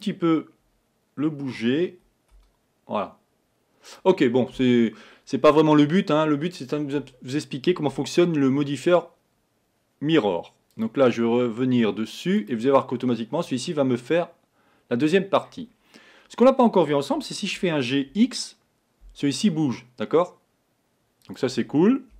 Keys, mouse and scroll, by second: 1.6 g, 10.8-13.6 drag, 13.6-15.7 middle drag, 15.7-16.9 scroll up 2, 17.7 g.